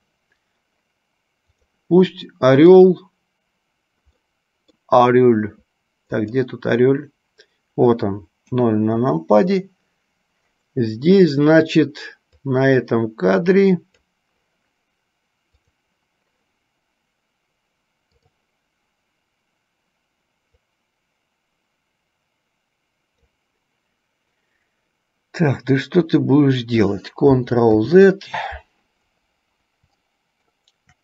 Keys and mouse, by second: 2.9 click, 4.5 middle click, 6.3 click, 8.6 KP_0, 12.8-14.4 drag, 15.8 click, 20.6-23.6 drag, 27.9 ctrl+z, 30.4 middle click.